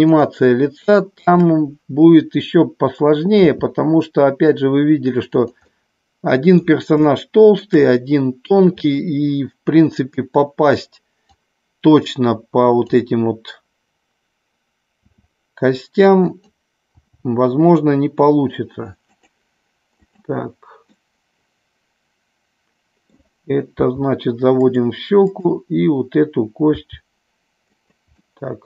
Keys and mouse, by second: 0.1 shift+click, 0.7 shift+click, 3.5 s, 5.2 click, 5.7 middle click, 7.0 shift+middle click, 7.9 middle click, 11.3-12.9 drag, 15.0 s, 16.2 click, 16.8 g, 19.1 click, 20.0 click, 21.0-23.0 middle drag, 23.7 g, 24.6 click, 25.2 click, 27.7 click, 28.1-28.6 middle drag.